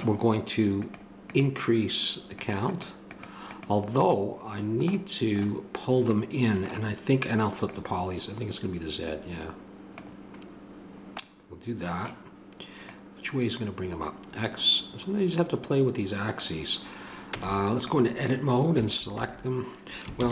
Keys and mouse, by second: 0.8-5.6 drag, 5.6-7.6 middle drag, 7.6-10.0 drag, 12.9-16.3 drag, 17.3 Tab, 18.7 a, 20.2 ctrl+n.